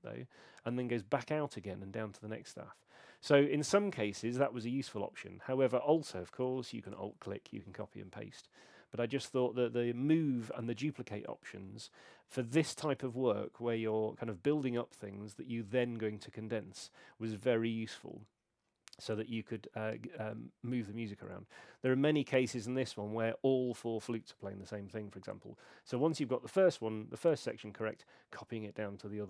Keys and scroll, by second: 0.0 alt+m, 2.8 alt+n, 3.2 alt+n.